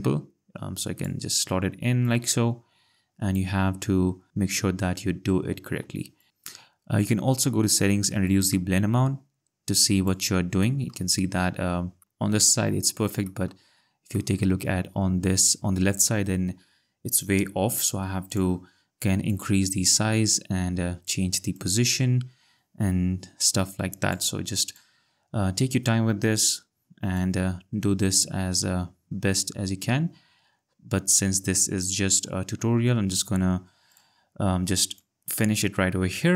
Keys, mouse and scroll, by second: 2.0 click, 4.3-4.9 ctrl+scroll, 6.2 ctrl+click, 6.3 click, 7.0 click, 10.6 click, 10.9 click, 11.1 ctrl+scroll, 12.0 scroll, 13.2 click, 13.5 click, 13.7-14.1 ctrl+scroll, 14.9 scroll, 18.3 click, 21.6 click, 24.8 ctrl+click, 27.1 ctrl+click, 32.4 ctrl+click, 33.9 click.